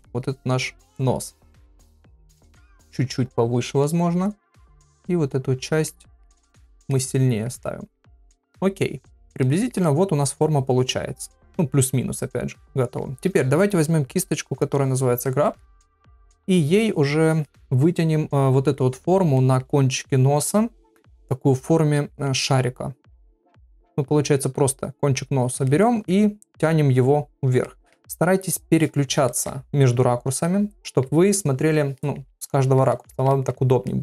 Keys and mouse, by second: 0.0 middle click, 0.8 click, 1.8 click, 2.6 click, 3.8 middle click, 4.9 click, 5.5 click, 5.9 middle click, 6.7 click, 6.9 middle click, 7.6 middle click, 8.1-9.3 middle drag, 9.4 ctrl+middle click, 9.8-12.9 middle drag, 15.2 ctrl+middle click, 15.6 middle click, 16.1 shift+middle click, 17.4 ctrl+middle click, 19.4 middle click, 22.0 middle click, 23.5 click, 24.4 click, 25.2 click, 25.6 middle click, 27.1 click, 27.6 middle click, 29.3 middle click, 30.4 middle click, 31.3 middle click, 32.0 middle click, 32.6 ctrl+middle click, 32.9 middle click, 33.3 ctrl+middle click, 33.9 middle click.